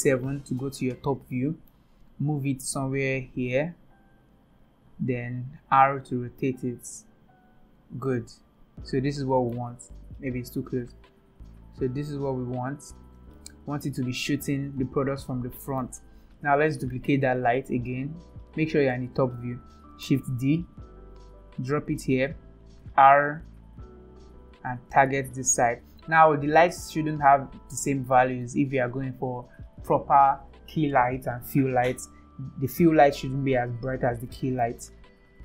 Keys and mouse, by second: 0.0 KP_7, 1.4-1.7 shift+middle drag, 2.6 g, 5.8 r, 8.1-9.5 middle drag, 10.2 KP_7, 11.3 g, 13.3-15.8 middle drag, 16.8 KP_7, 20.2 shift+d, 22.5 r.